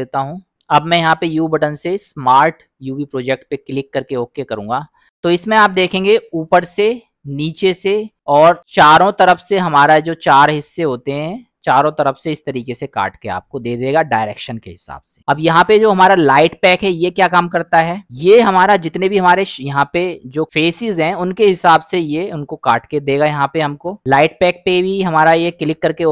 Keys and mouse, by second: 0.5 a, 1.2 u, 5.6 middle click, 6.9 click, 7.7-8.0 drag, 9.4 click, 10.4 click, 10.9-11.3 drag, 11.8-12.2 drag, 15.2 u, 19.3 middle click, 20.0 middle click, 21.0 middle click, 23.8 u.